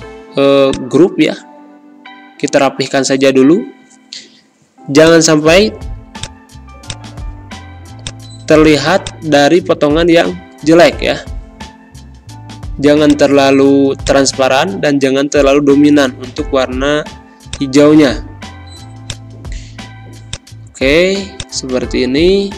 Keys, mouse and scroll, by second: 10.1 typing, 11.1 Return, 13.0 click, 14.9 4, 17.4 click, 19.7 z, 20.2 click, 21.1 space, 21.3 click, 21.5 space.